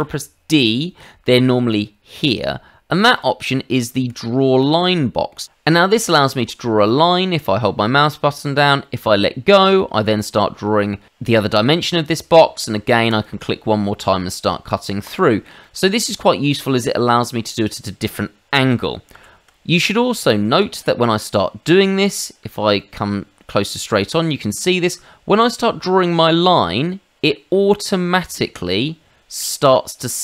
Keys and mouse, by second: 0.0 d, 3.1 click, 4.0 Escape, 4.6 middle click, 6.1 click, 13.1 click, 15.0 click, 15.6 middle click, 16.4 shift+middle click, 17.2 middle click, 19.1 ctrl+z, 20.4 shift+middle click, 20.7 middle click, 22.8 middle click, 25.4 click.